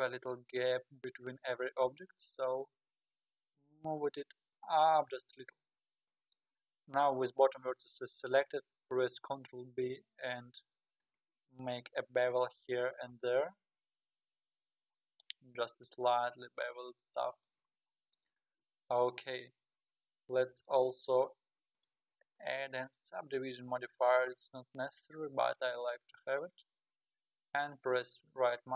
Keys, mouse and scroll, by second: 4.6-5.1 scroll down 7, 5.1-5.8 scroll up 15, 6.3-6.7 scroll up 10, 6.9-9.1 middle drag, 9.1 ctrl+b, 12.3 alt+click, 13.4 ctrl+b, 17.9-18.6 scroll up 8, 18.9 Tab, 20.6 alt+z, 21.7 click, 24.3-25.4 drag, 25.4-27.0 right drag, 27.0-28.7 middle drag.